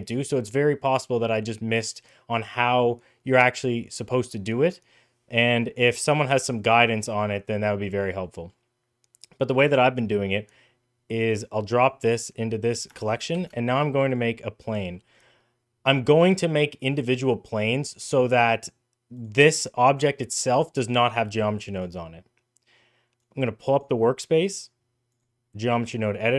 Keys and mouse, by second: 5.2 middle click, 5.7 middle click, 8.0 middle drag, 11.0-11.6 drag, 14.7 middle click, 19.0 click, 23.0 click, 24.3-25.0 drag.